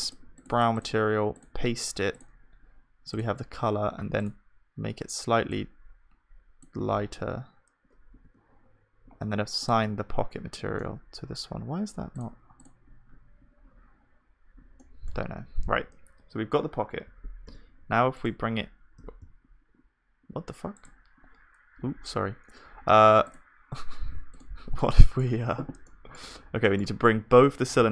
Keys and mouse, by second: 8.3 Tab, 10.8 click, 11.6-13.3 middle drag, 13.3-14.6 drag, 14.8-17.1 middle drag, 17.1 g, 19.0 g, 24.7-26.3 drag, 24.7-27.9 middle drag, 27.8 g.